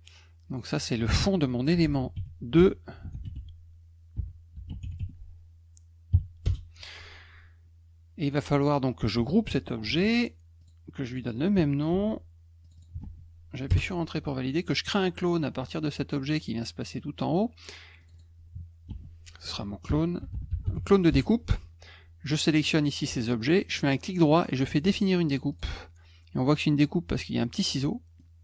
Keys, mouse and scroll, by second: 0.5 click, 0.6 click, 1.5-5.5 typing, 6.4 Return, 9.8 ctrl+g, 10.6 click, 11.1 click, 11.2 click, 11.9 ctrl+c, 12.6 click, 12.7 click, 13.0 ctrl+v, 13.7 Return, 15.8 click, 18.0 click, 18.1 click, 18.9 ctrl+v, 19.6-21.3 typing, 22.6 shift+click, 23.7 right click, 25.5 click, 27.8 middle click.